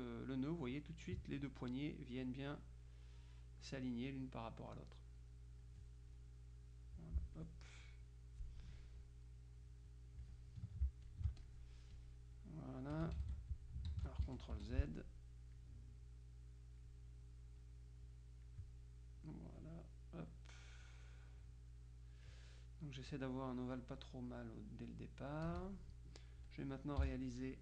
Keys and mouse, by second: 1.5-2.8 drag, 3.3 click, 4.5 click, 6.7-8.0 drag, 8.1-9.3 drag, 9.5-10.8 drag, 11.1 ctrl+alt+click, 12.5 click, 13.3 ctrl+z, 13.6 ctrl+click, 14.3 F1, 14.7 F2, 15.1-16.1 drag, 17.7-19.1 drag, 19.3 click, 20.4-22.9 drag, 23.2-24.3 drag, 24.5-26.3 drag, 26.5 click, 27.1 z, 27.2 click.